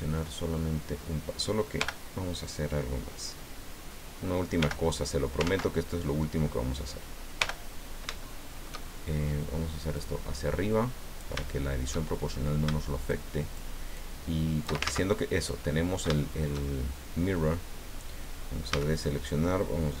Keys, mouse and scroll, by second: 1.8 l, 4.6 l, 5.4 ctrl+z, 7.4 l, 7.8-8.2 scroll down 1, 8.3-9.5 shift+middle drag, 10.0-11.4 drag, 11.5-12.5 shift+middle drag, 13.1 shift+click, 13.9 shift+click, 14.8 ctrl+shift+z, 15.5 click, 16.2-17.7 shift+middle drag, 18.7 a.